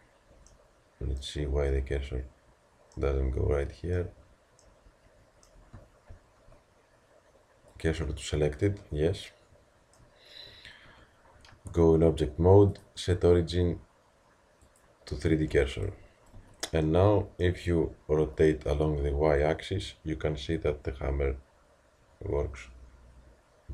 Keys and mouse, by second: 0.5 middle click, 0.8-6.1 middle drag, 9.4-11.5 middle drag, 11.5 Tab, 15.5 t, 16.4 z.